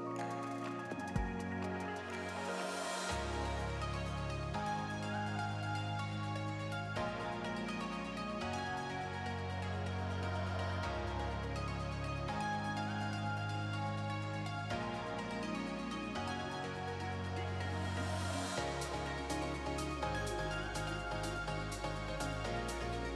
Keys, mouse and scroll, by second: 0.5 middle click, 1.5 click, 2.3 middle click, 3.2 click, 3.6 scroll down 2, 3.7 alt+a, 3.8 middle click, 4.4-5.0 scroll up 4, 4.6 shift+middle click, 4.8 middle click, 5.7 click, 6.5 middle click, 7.6 scroll down 1, 8.2-9.2 scroll down 5, 8.2 alt+a, 8.6 middle click, 9.2-9.6 scroll up 4, 9.7 scroll down 2, 10.0 scroll up 1, 10.0 shift+middle click, 10.2 middle click, 12.6 middle click, 14.2 shift+d, 15.4 middle click, 16.3 click, 16.9 middle click, 17.5 shift+middle click, 17.9 scroll up 2, 18.1 shift+middle click, 18.4 r, 20.2 middle click, 20.7 click, 21.5 middle click, 22.4 alt+a, 22.4-22.8 scroll down 6, 22.6 middle click, 23.0 scroll up 3.